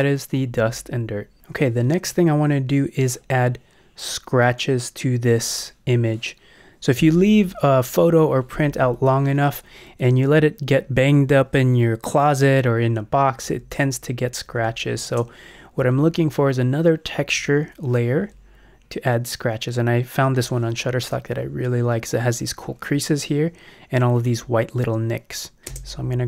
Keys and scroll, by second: 13.4 Down, 14.4 Up, 15.0 space, 17.1 Up, 25.7 space.